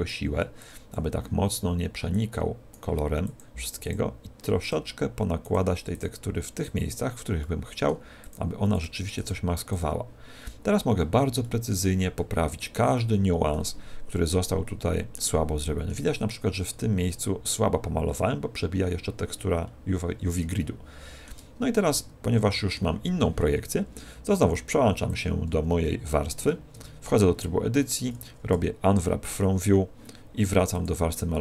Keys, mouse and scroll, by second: 3.9 click, 7.3 middle click, 8.1 click, 9.7 click, 10.2 click, 11.3 middle click, 12.1 middle click, 12.9 middle click, 14.5 middle click, 15.5 middle click, 16.5-17.0 scroll up 6, 19.4 scroll down 2, 20.5 shift+middle click, 20.5 scroll down 3, 21.9 middle click, 25.0 click, 26.7 Tab.